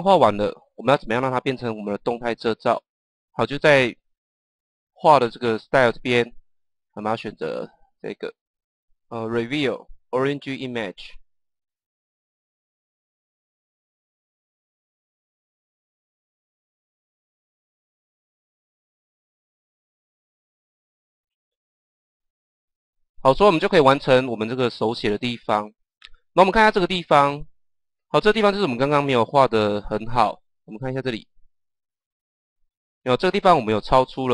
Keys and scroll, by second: 17.0 KP_0.